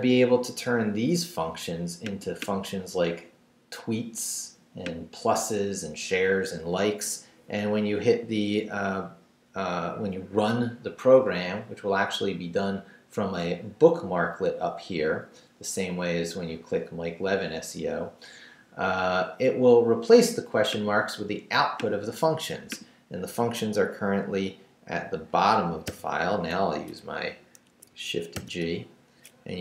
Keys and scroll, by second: 25.9 shift+g, 26.9 shift+BackSpace, 27.6 BackSpace, 27.6 Escape, 28.3 shift+g.